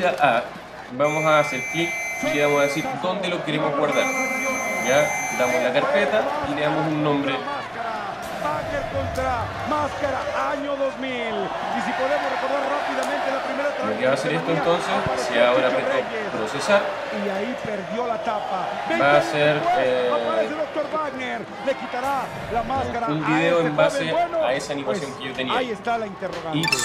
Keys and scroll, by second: 2.9 alt+super+-, 7.8-8.7 typing, 11.2 t, 11.9 t.